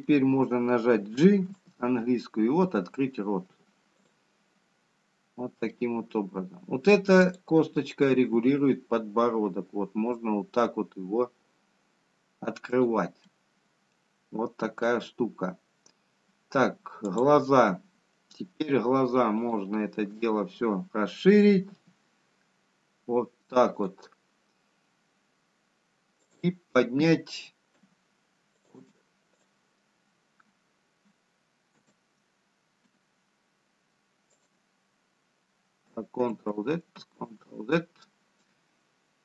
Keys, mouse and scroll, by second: 0.1 shift+click, 0.9 middle click, 4.0 g, 9.1 middle click, 10.1 click, 10.7 g, 16.3 middle click, 19.6 click, 22.8 shift+click, 24.1 g, 28.7 click.